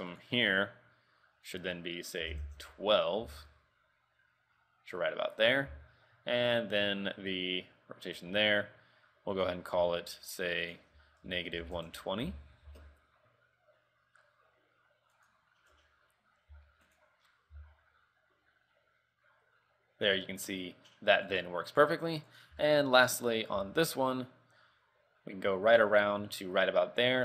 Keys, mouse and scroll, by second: 1.6 ctrl+click, 3.4 r, 6.0 r, 10.8 ctrl+click, 13.0 r, 16.8 r, 17.4-18.3 scroll down 3, 17.7 r, 21.9-22.5 scroll up 2, 22.5 right click, 22.8 shift+middle click, 23.2-23.5 scroll up 1, 23.7 r.